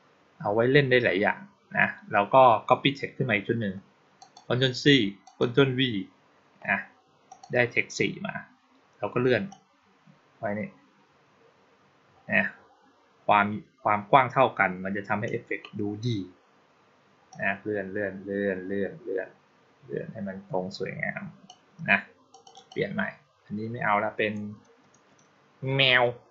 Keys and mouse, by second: 4.0 click, 5.1 click, 7.1 click, 9.3-15.1 drag, 17.2-21.3 drag, 22.2 click, 22.4 click.